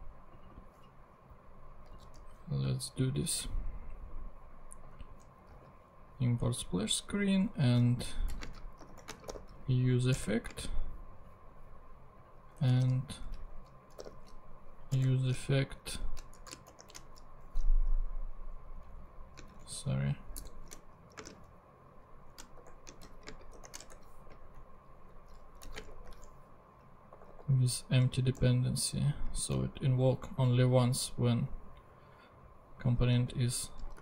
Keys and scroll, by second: 2.0 super+c, 2.2 super+Tab, 5.4 Return, 5.6 super+v, 7.6 Left, 8.4-10.6 typing, 10.2 Return, 12.5 Return, 13.4 Up, 13.7-14.7 typing, 15.0 Return, 15.8 shift+9, 16.3 shift+BackSpace, 16.7 shift+[, 17.7 shift+Right, 18.7 Left, 19.5 shift+Right, 20.3 shift+0, 21.3 shift+space, 22.5 shift+=, 23.1 shift+., 23.3 shift+space, 23.5 shift+[, 23.9 shift+Return, 24.7 Down, 24.9 Left, 25.7 ,, 25.9 [, 27.1 Right, 33.3 super+v.